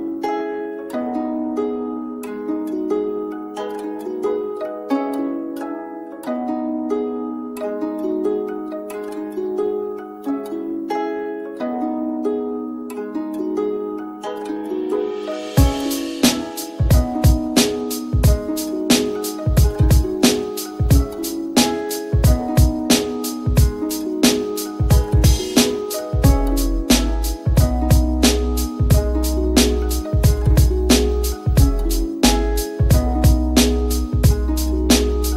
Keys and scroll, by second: 24.3 [, 24.8 ], 25.1 ], 25.5 ].